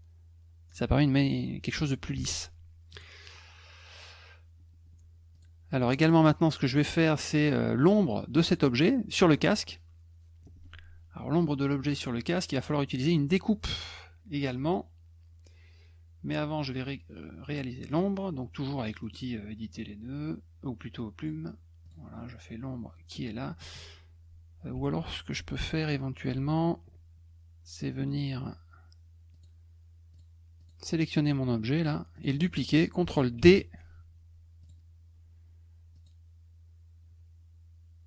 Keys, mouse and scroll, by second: 2.9 click, 3.9 click, 5.3 click, 5.9 click, 6.3 middle click, 8.4 click, 17.9 click, 19.0 middle click, 19.0 scroll up 1, 21.2 click, 21.8 click, 24.7 F1, 29.3 click, 30.1 click, 30.6 click, 32.1 click, 33.4 ctrl+d, 34.6 click, 35.9 click.